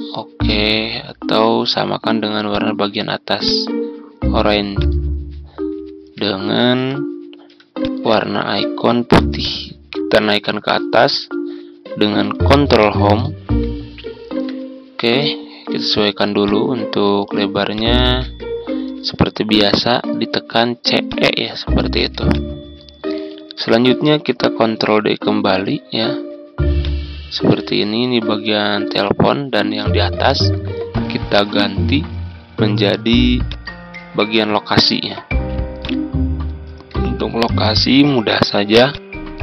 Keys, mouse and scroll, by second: 5.9-6.4 ctrl+scroll up 2, 6.8-7.1 ctrl+scroll up 1, 7.8-10.4 drag, 13.0 Home, 14.5 ctrl+scroll down 1, 16.4 ctrl+click, 17.7 shift+click, 18.6 typing, 22.2 click, 23.9 ctrl+d, 24.4-26.8 scroll down 1, 26.8-32.3 drag, 34.7 Delete, 35.7 click, 38.2 ctrl+d, 38.3 ctrl+d, 38.9 click.